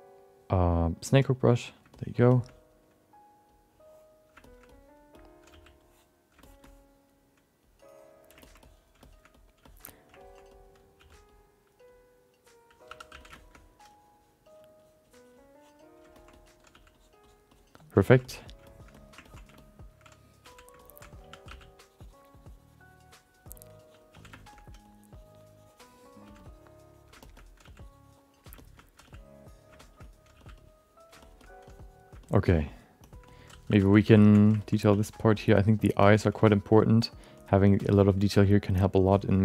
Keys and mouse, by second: 1.3 click, 1.9 alt+middle click, 2.3 alt+shift+middle click, 2.5 alt+middle click, 3.5 click, 4.4 shift+middle click, 4.7 alt+middle click, 5.1 middle click, 5.5 f, 5.8 click, 6.4 alt+shift+middle click, 6.6 alt+middle click, 7.6 click, 8.4 ctrl+alt+middle click, 8.6 middle click, 9.0 alt+shift+middle click, 9.3 middle click, 9.6 alt+shift+middle click, 10.2 ctrl+alt+middle click, 10.5 alt+middle click, 10.9 f, 11.3 click, 11.9 click, 12.9 2, 13.1 f, 13.3 alt+shift+middle click, 13.9 click, 14.8 click, 15.0 click, 15.4 click, 16.1 ctrl+middle click, 16.3 alt+middle click, 16.7 f, 16.9 click, 17.2 click, 17.5 click, 17.8 click, 18.0 ctrl+middle click, 18.2 alt+middle click, 18.6 alt+shift+middle click, 18.9 middle click, 19.2 ctrl+middle click, 19.5 alt+shift+middle click, 20.5 f, 20.8 alt+shift+middle click, 21.2 1, 21.4 f, 21.8-23.4 drag, 23.5 click, 24.1 f, 24.3 alt+shift+middle click, 24.5 alt+middle click, 24.8-26.0 drag, 26.3 f, 26.4 click, 27.2 alt+middle click, 27.6 f, 27.8 click, 28.5 alt+shift+middle click, 29.0 f, 29.5 click, 29.8 alt+shift+middle click, 30.0 middle click, 30.6 click, 30.6 f, 31.2 alt+shift+middle click, 31.4 alt+middle click, 31.6 click, 32.2 alt+shift+middle click, 33.0 shift+middle click, 33.3 middle click, 33.7 2, 33.9 f, 34.2 alt+shift+middle click, 34.3 alt+middle click, 34.6 ctrl+alt+middle click, 34.9 f, 35.1 click, 36.0 alt+shift+middle click, 36.1 shift+middle click, 36.4 click, 37.3 click, 37.8 shift+middle click, 37.9 middle click, 38.7-39.4 drag, 38.7 f.